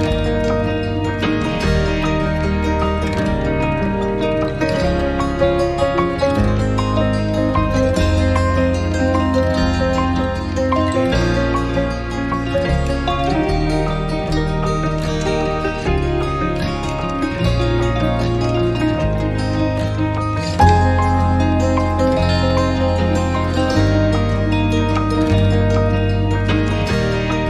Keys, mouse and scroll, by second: 1.2 alt+click, 2.1 alt+middle click, 2.3 alt+click, 5.0 right click, 8.5 alt+click, 14.3 scroll up 1, 14.4 scroll down 1, 15.0 scroll up 1, 15.7 alt+click, 16.9 alt+click, 17.6 alt+middle click, 18.0 alt+click, 24.6 double click, 25.5-25.8 typing, 26.0 Return.